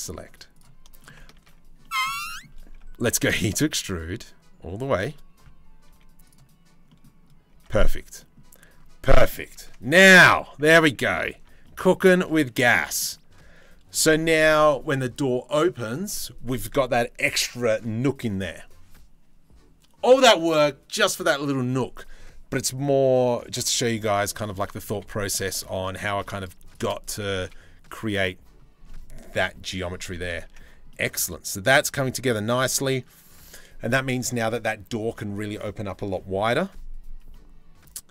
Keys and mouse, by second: 0.9 ctrl+z, 2.7 e, 5.0 z, 5.5 z, 7.2 Tab, 9.1 Tab, 10.0 Tab, 10.9 Tab, 11.6 a, 12.3 middle click, 23.6 middle click, 24.5 2, 24.9 middle click, 25.2 middle click, 25.6 shift+middle click, 27.0 Delete, 28.4 middle click, 29.3 middle click, 30.1 Tab.